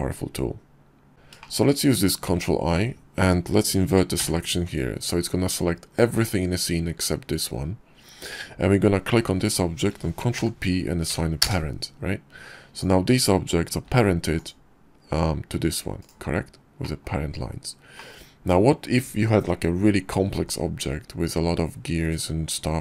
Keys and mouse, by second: 1.1 shift+click, 3.7 ctrl+i, 8.6 shift+click, 9.9 ctrl+p, 13.4 g, 13.9 click, 14.7 g, 16.4 click, 17.5 click.